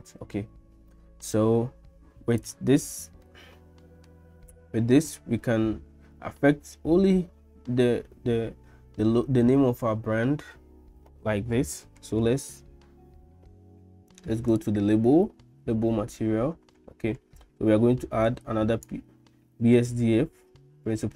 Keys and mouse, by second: 3.3 middle click, 5.0 click, 14.5 click, 18.3 click.